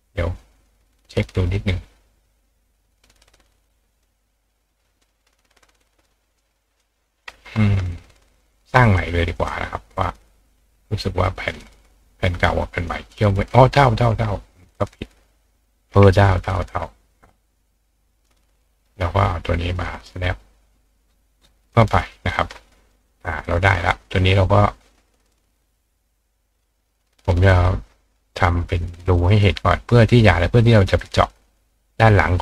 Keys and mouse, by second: 0.6 click, 1.7-3.3 drag, 3.4 click, 4.0 click, 6.4 click, 7.5 ctrl+click, 7.5-8.7 ctrl+right drag, 8.8 click, 9.4 click, 11.5-12.9 drag, 14.1 ctrl+click, 16.8-18.3 ctrl+drag, 19.8-21.7 ctrl+drag, 19.8-29.3 ctrl+right drag, 22.2 ctrl+click, 22.9 click, 27.5 click, 31.4 click.